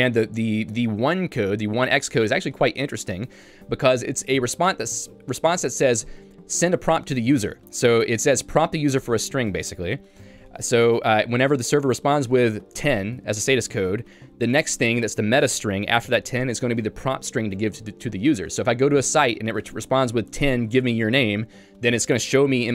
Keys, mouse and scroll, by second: 0.6 l, 1.5 j.